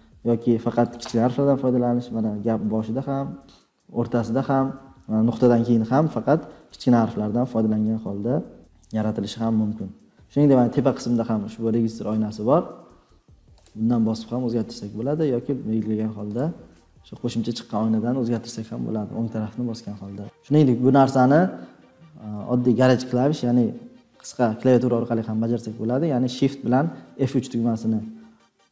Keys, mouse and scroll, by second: 0.8-2.0 drag, 21.0 scroll down 1, 26.8 F3.